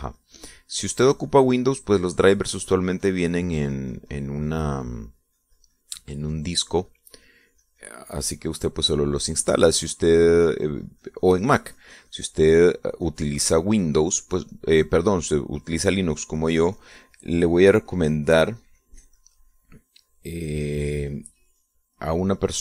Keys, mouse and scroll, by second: 14.5-16.6 drag, 17.0-19.4 drag, 19.5-22.6 drag.